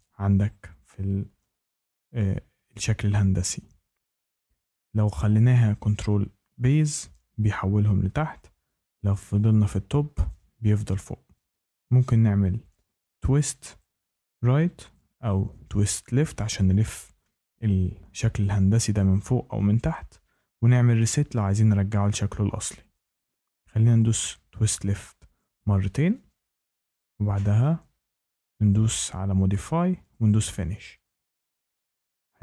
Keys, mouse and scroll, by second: 5.8 click, 9.0 click, 23.9 click, 24.9 click, 28.9 click, 30.2 click.